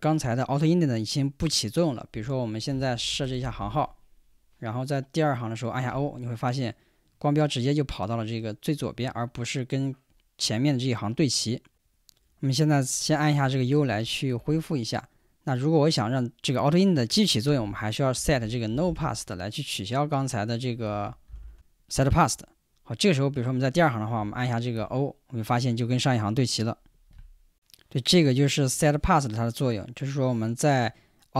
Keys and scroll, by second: 2.1-4.1 typing, 5.9 o, 13.4 u, 13.9 Escape, 17.5-19.4 typing, 20.9 ctrl+w, 21.0-22.0 typing, 22.2 Return, 24.2 w, 24.7 o.